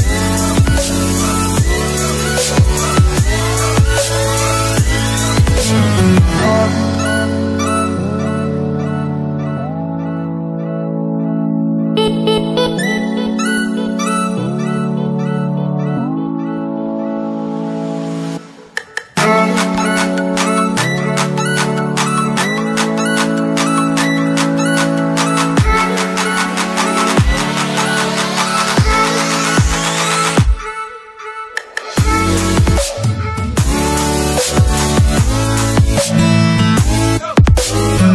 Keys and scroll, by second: 7.1 Delete.